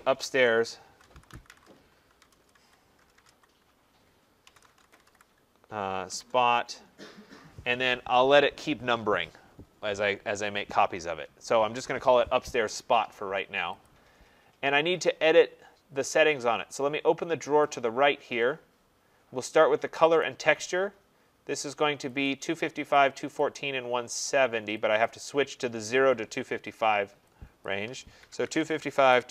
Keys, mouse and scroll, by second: 0.2-3.1 typing, 4.4 BackSpace, 9.0-9.8 typing, 13.9 click, 17.6 click, 20.2 click, 22.3 click, 23.0 click, 23.6 click, 25.1 click, 27.6 click, 28.2-29.3 typing.